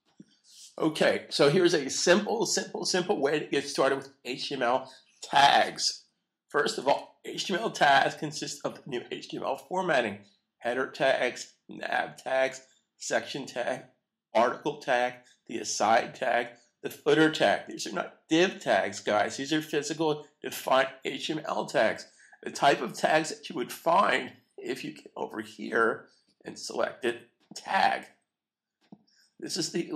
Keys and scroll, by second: 6.8 super+s.